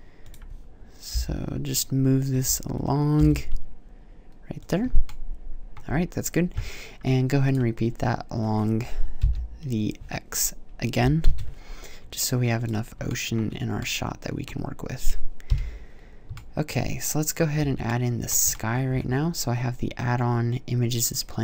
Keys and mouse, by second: 0.1 click, 0.9 g, 4.5-4.9 drag, 7.3-8.6 drag, 9.0 KP_7, 10.8 g, 15.3 KP_5, 17.4 a, 18.8 shift+a.